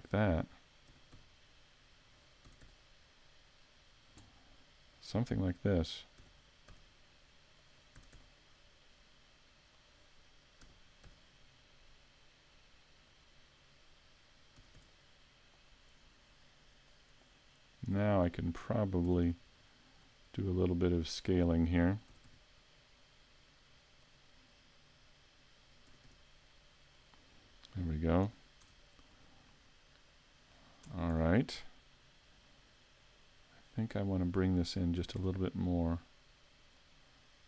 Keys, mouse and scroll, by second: 0.1 click, 0.9 e, 2.2 click, 2.5 s, 3.8 click, 6.2 e, 7.7 click, 8.0 s, 9.9 click, 10.6 e, 13.2 click, 14.6 s, 17.0 click, 18.3 right click, 19.1 s, 20.2 click, 21.2 right click, 22.1 s, 24.2 click, 25.1 right click, 25.9 s, 27.1 click, 27.4 scroll down 2, 28.3 a, 28.7 Tab, 29.1 scroll down 1, 29.5 middle click, 30.9 Tab, 31.1-31.7 scroll up 5, 34.0 right click, 35.0 s, 36.9 click.